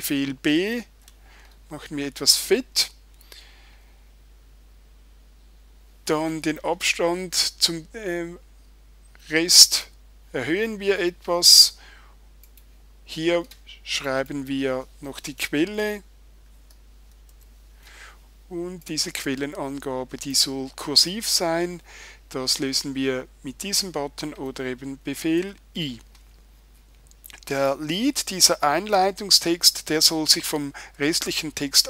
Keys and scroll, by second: 0.6 super+b, 25.4 super+i.